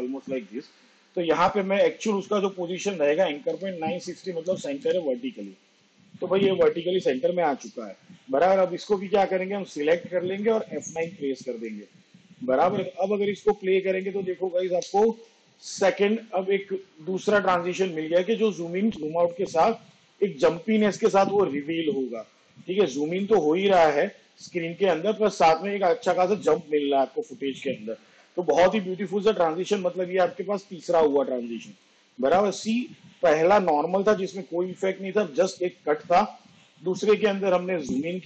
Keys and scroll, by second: 3.3 9, 10.8 F9, 14.6 space, 27.9 space.